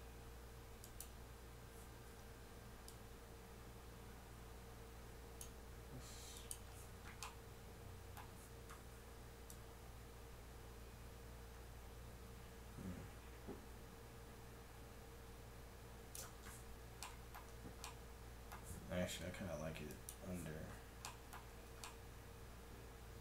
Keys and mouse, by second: 0.8-2.7 drag, 2.9-4.5 drag, 6.4-8.1 drag, 8.1-9.5 middle drag, 9.5-10.8 drag, 17.6 Tab, 19.9 click, 21.5 Tab.